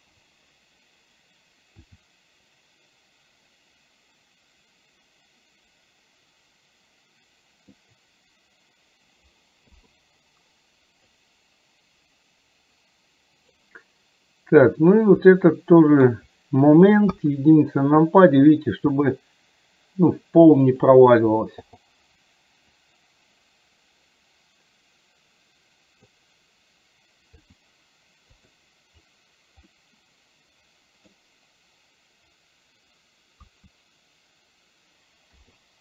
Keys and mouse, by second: 1.8 r, 11.1-13.7 drag, 15.4 middle click, 17.1 KP_1, 19.0 r, 22.9-26.2 drag, 27.4 r, 29.7-31.2 middle drag, 33.5 KP_1, 35.4 i.